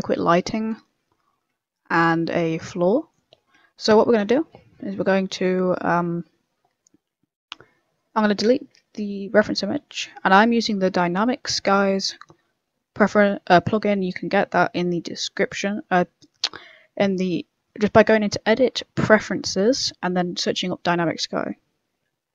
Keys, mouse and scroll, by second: 0.2 right click, 1.8 middle click, 3.2 middle click, 8.3 middle click, 9.4 Delete, 9.6 middle click, 17.9 click.